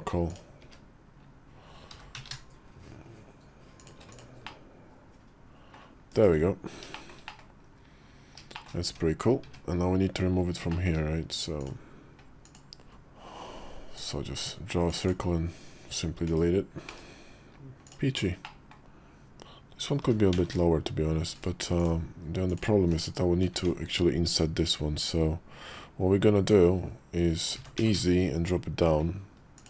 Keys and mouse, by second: 0.1 click, 0.5 `, 1.8 g, 4.0 click, 4.3-5.6 middle drag, 5.9 /, 6.8 shift+middle click, 7.1 middle click, 7.5 KP_5, 8.4 shift+middle click, 8.7 `, 9.3 `, 9.9 KP_5, 10.5 shift+middle click, 11.4 click, 12.3 click, 12.9 d, 13.8-15.1 drag, 16.1 /, 16.7 /, 17.7 click, 18.3 middle click, 18.8 KP_5, 19.9 g, 22.4 click, 22.7 /, 23.4 Tab, 27.4 e.